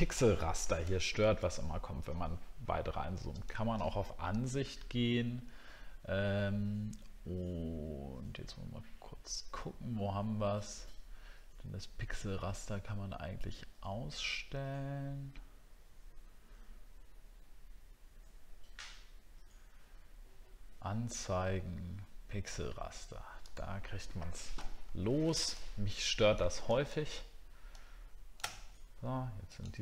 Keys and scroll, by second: 0.8 alt+scroll up 1, 25.0 alt+scroll down 1, 28.6-28.9 alt+scroll down 2.